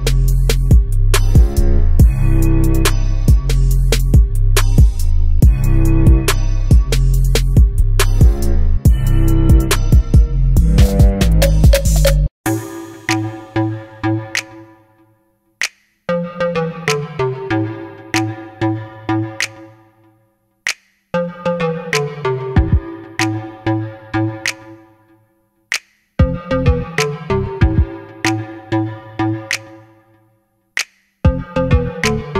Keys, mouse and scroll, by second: 0.4 ctrl+r, 2.5 click, 3.5 3, 3.8 click, 4.1 e, 5.8 click, 6.9 g, 8.3 click, 8.5-11.5 middle drag, 9.2 scroll up 1, 9.4 scroll down 2, 11.5 click, 11.9 e, 14.3 click, 14.5-15.7 middle drag, 15.2 e, 15.7 click, 15.8 e, 17.6 click, 18.0 e, 20.2 click, 20.3-26.5 middle drag, 20.9 scroll up 1, 22.6 KP_1, 23.0 KP_2, 23.3 KP_3, 23.8-24.2 scroll up 1, 24.2 KP_Decimal, 25.4 e, 26.5 click, 26.8-28.7 middle drag, 28.7 click, 29.1 e, 31.2-32.2 middle drag, 32.2 scroll up 2.